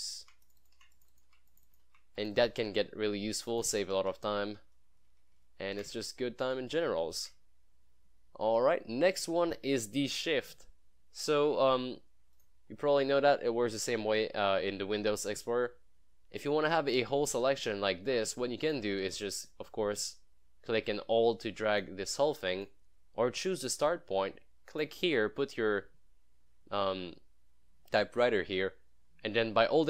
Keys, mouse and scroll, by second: 0.0 click, 0.4 ctrl+v, 0.5 click, 0.7 click, 0.9 ctrl+v, 1.0 click, 1.4 ctrl+v, 1.5 click, 1.9 ctrl+v, 2.2 click, 2.7 ctrl+v, 3.5 click, 4.0 ctrl+v, 4.8 ctrl+z, 6.4 click, 6.8 ctrl+s, 12.4 click, 12.9 scroll up 1, 13.2 scroll down 1, 17.5-19.0 drag.